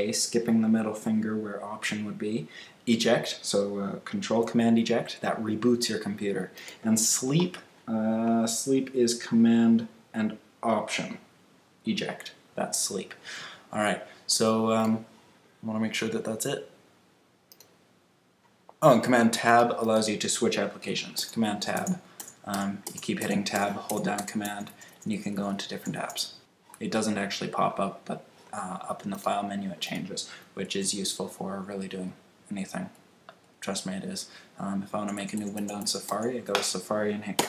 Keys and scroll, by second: 21.1 super+Tab, 30.6 super+Tab, 34.9 super+Tab.